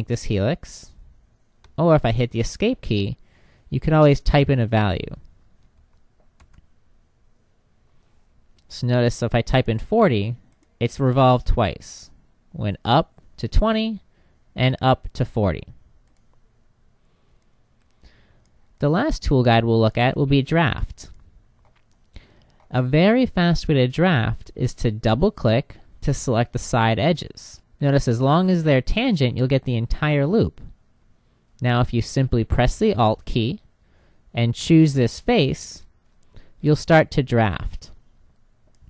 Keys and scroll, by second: 1.0 Escape.